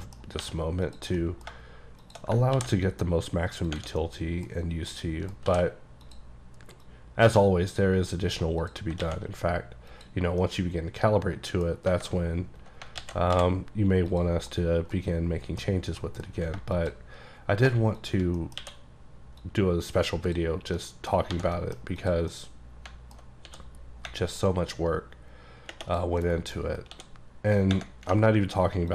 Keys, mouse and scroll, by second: 0.1 middle click, 0.5 2, 0.9 click, 1.2 middle click, 1.5-2.1 scroll down 2, 2.1 shift+click, 2.6 ctrl+b, 3.7 click, 4.0 middle click, 4.6-5.0 scroll up 2, 5.0 middle click, 5.5 d, 6.1 click, 6.9 click, 8.8 click, 9.1 alt+x, 9.9 click, 10.4 scroll down 1, 10.5 middle click, 11.9 alt+middle click, 12.9 alt+middle click, 13.0 alt+x, 14.1 click, 14.9 middle click, 15.7 scroll down 1, 16.0 middle click, 16.8 shift+click, 17.7 shift+click, 18.1 shift+click, 18.4 middle click, 18.6 q, 19.4 click, 20.8 middle click, 21.4 1, 21.6 middle click, 22.0 click, 22.4 middle click, 23.5 d, 24.5 click, 26.3-26.7 scroll down 1, 26.7-27.0 scroll up 3, 27.0 d.